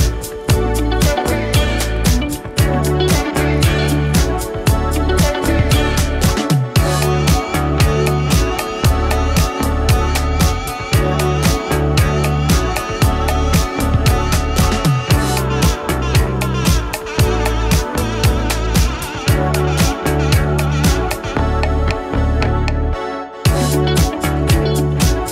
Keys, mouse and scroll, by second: 0.7-1.6 drag, 2.6-3.6 typing, 4.8-7.3 drag, 8.0-8.9 typing, 9.0 Return, 10.2-10.9 click, 10.8 space, 13.5-15.4 drag, 20.4 space, 22.9-24.3 drag.